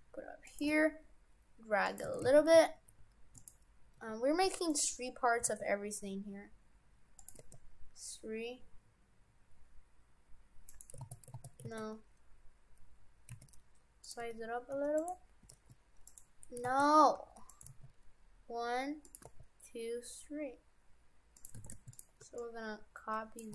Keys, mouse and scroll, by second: 0.7 g, 2.1 shift+f, 4.0 Tab, 4.5 Tab, 4.7 right click, 5.4 e, 7.4 e, 11.0 ctrl+z, 11.3 ctrl+z, 11.8 ctrl+z, 13.3 s, 14.2 Tab, 14.7 Tab, 15.0 right click, 15.5 e, 16.7 ctrl+z, 17.2 g, 17.7 e, 19.3 e, 21.6 shift+f, 22.2 b.